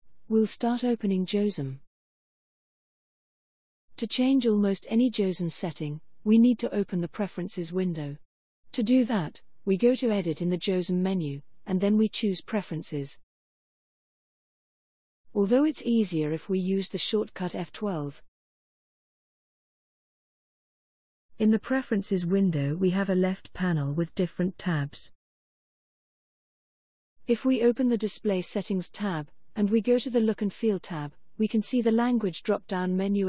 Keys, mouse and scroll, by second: 10.4 click, 20.6 click, 28.2 click, 29.8 click.